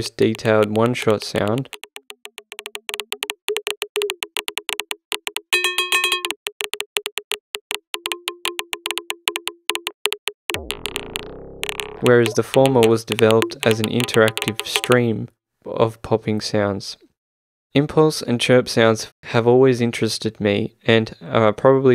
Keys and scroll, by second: 0.0-15.4 typing.